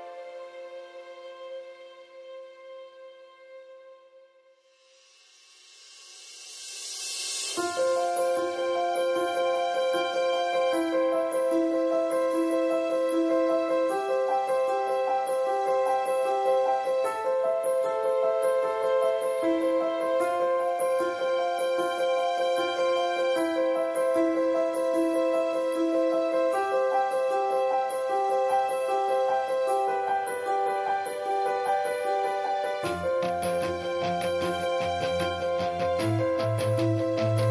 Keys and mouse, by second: 0.3 ctrl+s, 1.3 middle click, 1.6-2.1 right drag, 1.8 l, 2.2 ctrl+s, 3.2-4.0 middle drag, 3.8-4.7 typing, 5.0 ctrl+s, 5.2 middle click, 5.8 ctrl+s, 6.9 middle click, 7.0 click, 7.5 middle drag, 7.8 middle click, 8.3 click, 8.9-9.6 middle drag, 9.6 click, 10.2 middle click, 11.0 click, 13.7-15.2 middle drag, 15.2-15.6 drag, 15.6-16.2 middle drag, 16.2 drag, 16.5-17.4 middle drag, 17.4-18.0 drag, 18.0 ctrl+s, 18.0-18.5 middle drag, 18.5-19.8 drag, 20.3-21.6 drag, 21.6 middle click, 21.8-24.5 middle drag, 24.9 drag, 25.2 middle click, 25.5 click, 25.9-26.9 middle drag, 26.9 drag, 27.1 right click, 27.6-29.1 middle drag, 29.1 click, 29.5 middle click, 30.0 middle click, 30.5 ctrl+s, 30.5 click, 30.6 middle click, 30.8 click, 31.8 x, 32.1-32.5 drag, 32.7 ctrl+s, 32.9 a, 33.0 a, 34.7-35.1 [, 36.0 click, 36.1 ctrl+z, 36.2-37.0 drag, 37.0 middle click.